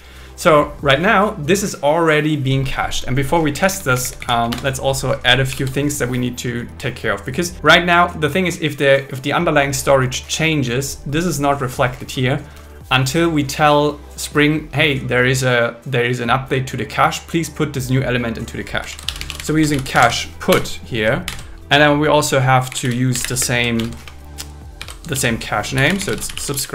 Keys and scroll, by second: 3.7 Down, 4.5 Return, 5.5 alt+l, 19.0 shift+c, 19.7 shift+p, 20.5 Return, 21.3 shift+8, 23.4 space, 23.8 shift+0, 24.0 space, 24.8 alt+5, 25.1 shift+2.